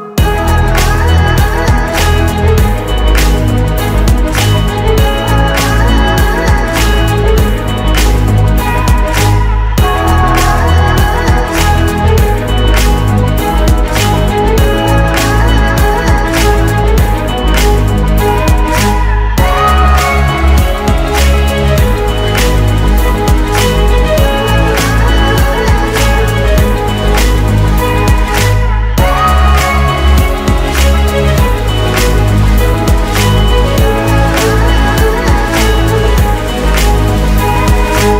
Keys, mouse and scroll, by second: 0.4 ctrl+d, 6.7 Return, 6.8 Right, 8.2-9.8 typing, 11.4-12.0 typing, 13.2-14.7 typing, 16.3 double click, 29.5 typing, 30.0 Return, 33.1 double click, 35.8 Return, 36.0 Right, 36.4-37.9 typing.